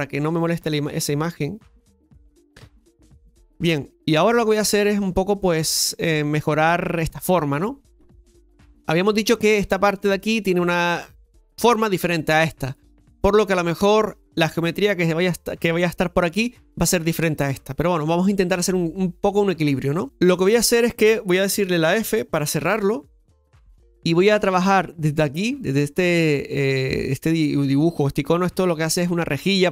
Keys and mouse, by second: 4.2 middle click, 13.7-22.6 shift+middle drag, 22.6 f, 28.4 click.